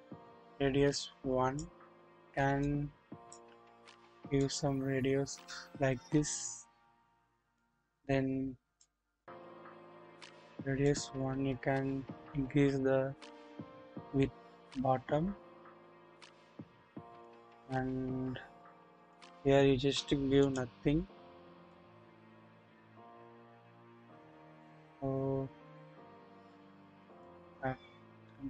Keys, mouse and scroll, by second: 0.3-1.5 drag, 1.9-2.3 scroll up 1, 2.3 scroll down 1, 2.6 click, 4.3-7.6 drag, 8.8 click, 10.9-16.6 drag, 18.9-20.5 drag, 21.7-27.2 drag.